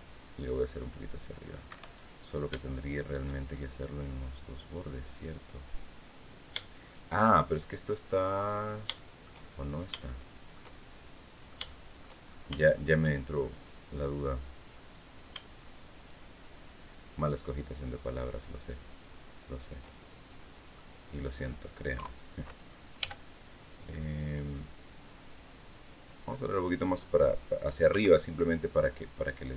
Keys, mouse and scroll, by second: 1.4 Escape, 1.8 click, 2.7-3.7 shift+scroll up 5, 4.8 right click, 5.8 right click, 6.5 shift+right click, 7.0-7.3 shift+scroll down 2, 7.6 click, 8.6 shift+scroll down 2, 8.7 shift+click, 9.6-11.4 shift+middle drag, 11.5 shift+middle click, 12.4 shift+middle click, 14.3 click, 15.7 shift+right click, 16.4 shift+right click, 16.9 shift+right click, 17.6 shift+right click, 18.0 shift+right click, 19.1 shift+right click, 20.0 shift+middle click, 21.7 KP_3, 22.7 g, 26.3 click, 26.7 scroll down 1, 27.7 Tab, 28.1 right click.